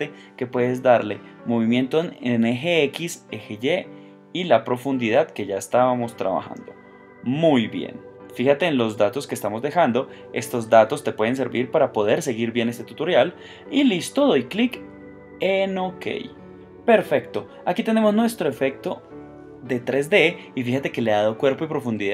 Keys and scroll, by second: 4.3 shift+Tab.